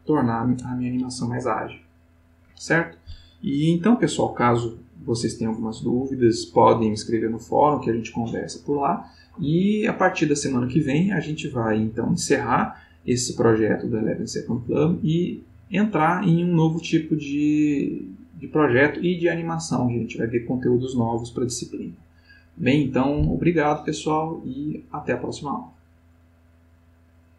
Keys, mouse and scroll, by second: 27.3 click.